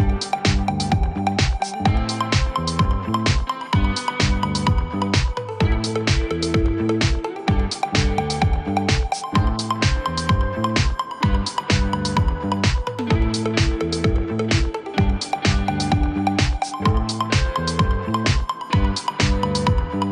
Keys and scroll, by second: 10.3 space, 12.7 e, 12.9 c.